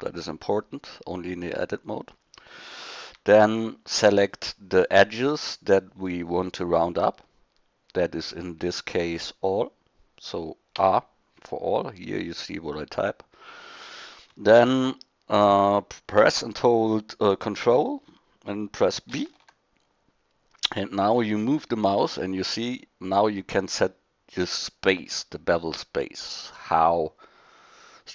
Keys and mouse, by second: 3.0 a, 10.8 a, 19.1 ctrl+b.